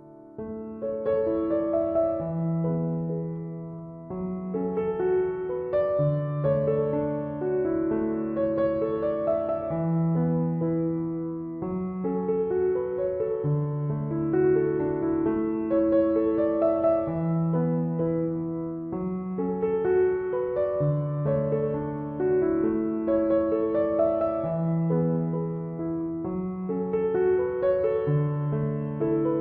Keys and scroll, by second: 0.1 ctrl+=, 11.9 ctrl+z, 12.5 ctrl+-, 14.7 ctrl+=, 27.0 ctrl+-, 27.6 ctrl+=, 28.3 ctrl+-.